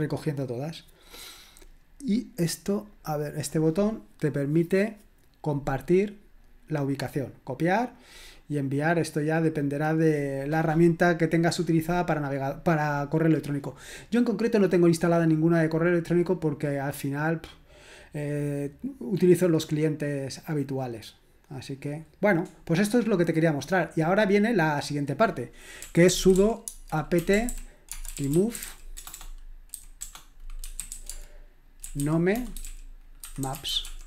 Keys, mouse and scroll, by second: 2.0 click, 7.9 click, 21.7 click, 23.6 click, 24.8 click, 25.5-34.0 typing.